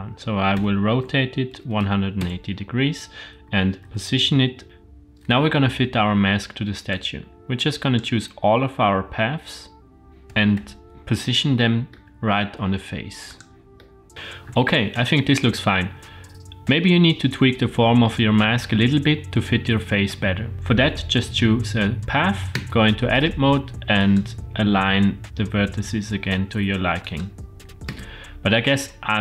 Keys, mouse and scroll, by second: 0.5 r, 3.4 r, 4.6 click, 6.9-8.0 drag, 10.1 middle click, 10.5 KP_1, 11.6-11.9 shift+middle drag, 12.2 g, 13.8-14.1 middle drag, 14.1 scroll down 2, 20.5 click, 22.6 Tab, 24.0 click, 24.7 g, 27.9 Tab, 28.3-28.9 scroll down 2, 28.7-29.2 middle drag.